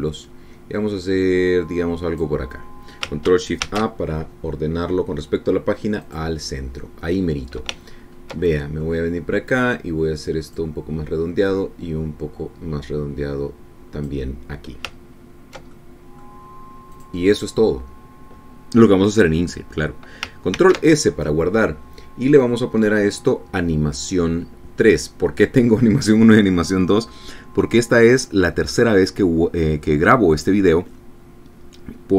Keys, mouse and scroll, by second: 4.7 ctrl+shift+a, 7.0 click, 8.9-9.4 ctrl+scroll up 2, 9.5 ctrl+middle click, 10.8-11.8 drag, 12.5-15.3 drag, 16.1-16.6 ctrl+scroll down 2, 16.8 ctrl+click, 18.0 click, 18.4 click, 21.6 ctrl+s.